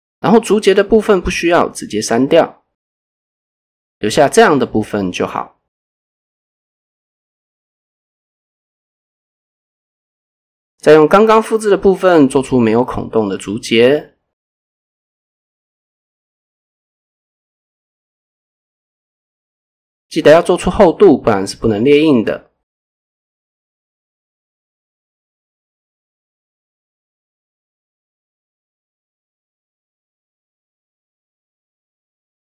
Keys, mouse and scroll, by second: 0.8 alt+click, 1.2 x, 2.9 alt+click, 3.2 x, 3.9 Tab, 8.4 click, 9.6 click, 10.1 click, 10.9 click, 11.9 click, 12.2 Tab, 13.7 x, 15.8 Tab, 16.4 shift+middle click, 16.7 scroll up 2, 16.9 Tab, 17.2 shift+middle click, 17.5-17.9 scroll up 2, 17.9 a, 18.2 middle click, 18.9 scroll down 1, 19.2 middle click, 20.1-20.8 scroll down 1, 21.0 alt+e, 23.0 click, 23.4 middle click, 24.0 KP_7, 24.8-26.0 scroll up 1, 26.8 middle click, 27.3 scroll up 1, 28.2 alt+click, 30.0 KP_7, 30.8 click.